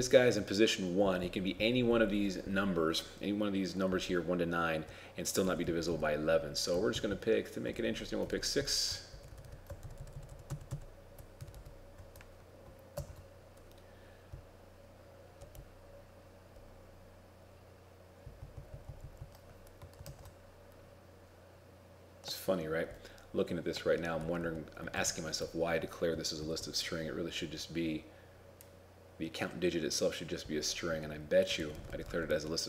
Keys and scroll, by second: 7.8 shift+Right, 8.0 shift+Right, 8.8 ctrl+shift+Right, 9.9 ctrl+shift+Right, 10.0 ctrl+shift+Right, 11.5 shift+Left, 13.0 shift+Left, 13.1 ctrl+c, 20.1 ctrl+shift+s, 25.1 ctrl+Right, 26.5 shift+End, 31.8 ctrl+Left, 32.0 ctrl+Left, 32.1 ctrl+Left.